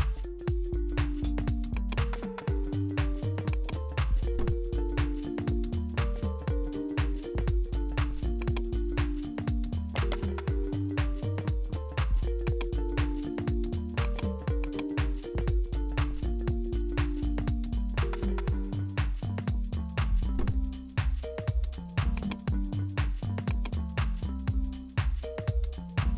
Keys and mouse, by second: 2.6 Tab, 3.5-7.2 drag, 8.4 click, 9.6 3, 9.9 right click, 11.1 s, 12.5 click, 13.2 s, 14.6 click, 16.5-18.2 drag, 18.2 i, 23.8 click.